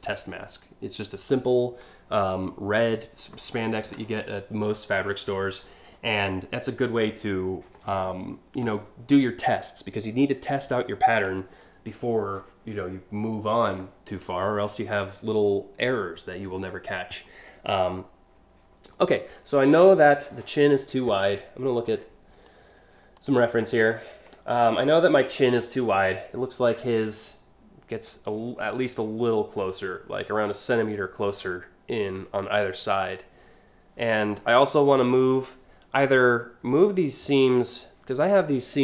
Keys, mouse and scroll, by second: 21.4 click, 22.8 click, 23.7 scroll up 1.